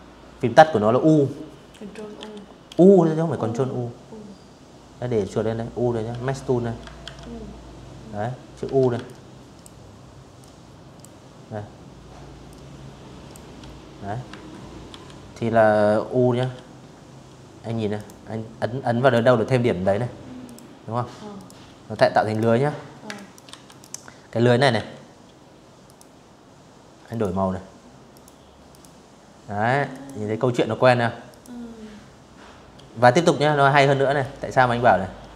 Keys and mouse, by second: 4.7 ctrl+1, 6.7 ctrl+click, 8.0 ctrl+click, 10.1 ctrl+click, 11.9 Escape, 12.5 v, 14.0 u, 15.6 click, 16.7 click, 18.1 click, 19.0 click, 19.6 v, 20.0 click, 20.7 space, 20.8 click, 21.1 v, 21.3 click, 22.4 a, 23.5 click, 24.7 click, 25.8 click, 26.3 click, 27.6 click, 28.9 click, 31.9-33.0 drag, 33.5 click, 35.0 click.